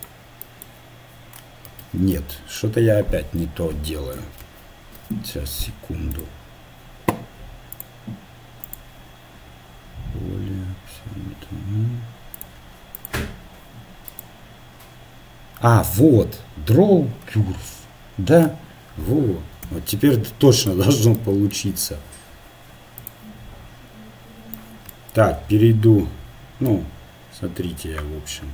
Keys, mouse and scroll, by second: 0.5-1.6 middle drag, 1.7 ctrl+z, 4.4 ctrl+z, 6.9-9.6 drag, 12.4-15.9 drag, 19.6 x, 21.3-22.9 middle drag, 23.4-24.8 right drag.